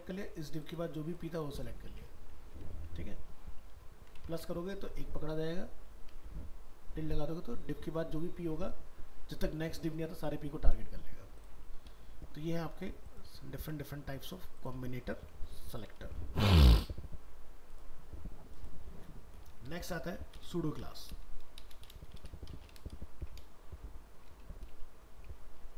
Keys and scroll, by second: 2.6 alt+Tab, 3.3 ctrl+z, 4.3 alt+Tab, 11.7 ctrl+s, 12.0 ctrl+w, 13.3 ctrl+s, 15.1 ctrl+w, 19.8 alt+移, 22.9 ctrl+shift+Left.